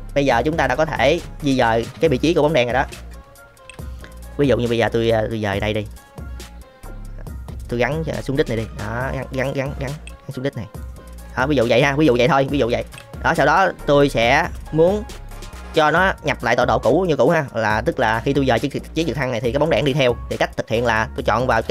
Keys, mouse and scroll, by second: 0.4 click, 2.9 KP_3, 3.6 g, 6.0-8.2 middle drag, 8.5 g, 10.0 g, 11.3-12.1 middle drag, 12.4 middle click, 12.9 KP_3, 18.3 g, 20.7 click.